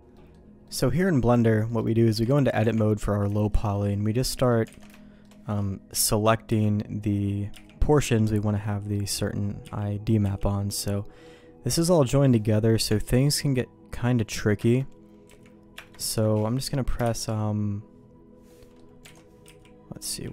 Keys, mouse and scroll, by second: 0.1 middle click, 0.6 middle click, 1.6 middle click, 2.1 Tab, 2.6 Tab, 3.3 shift+middle click, 4.3 middle click, 4.7 alt+a, 4.9 shift+middle click, 5.9 l, 6.5 l, 7.5 l, 8.0 l, 8.6 middle click, 9.6 l, 10.2 click, 10.7 click, 12.2 click, 12.9 Tab, 13.2 click, 14.6 ctrl+KP_Add, 15.3 ctrl+z, 15.7 ctrl+KP_Add, 17.2 shift+l, 18.5 middle click, 19.1 alt+a, 19.4 l, 20.1 l.